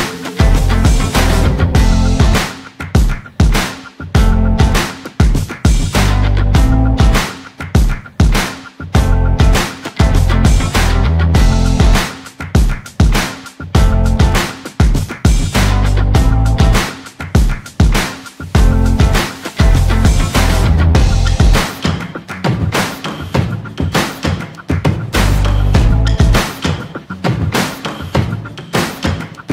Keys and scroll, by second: 16.1 ctrl+z.